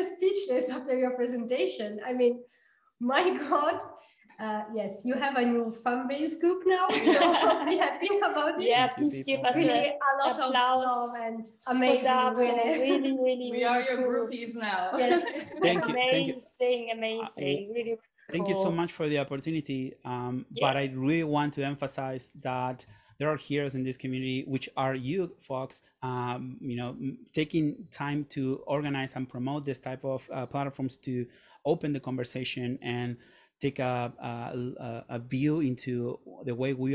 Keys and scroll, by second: 3.5-4.3 typing, 15.0 r, 28.1 super+..